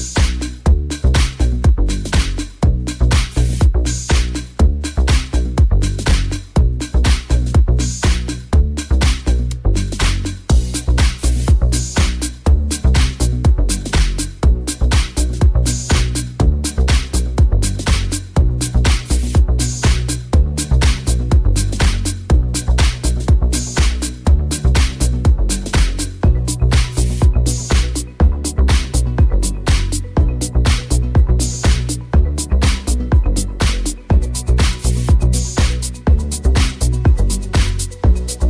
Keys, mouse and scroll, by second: 0.6-3.1 shift+middle drag, 3.1-32.2 middle drag, 5.9 right click, 10.1 right click, 29.2 right click, 32.2 alt+right click, 32.3-33.8 alt+middle drag, 33.2 shift+right click, 33.4 shift+right click, 33.7 shift+right click, 34.2 shift+middle click, 34.2 shift+right click, 34.4 shift+right click, 34.4 shift+middle click, 34.7 shift+right click, 34.7 shift+middle click, 34.9 shift+right click, 35.0 shift+middle click, 35.2 shift+right click, 35.4 shift+right click, 35.4 shift+middle click, 36.1 shift+right click, 36.2 shift+middle click, 36.5 shift+right click, 36.6-38.1 shift+middle drag, 37.7 c.